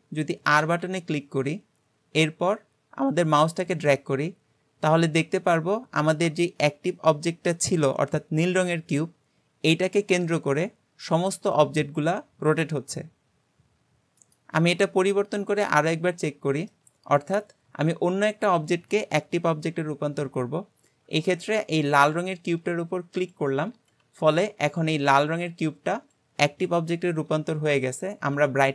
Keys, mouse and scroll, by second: 15.1-18.1 shift+middle drag, 23.2 shift+click.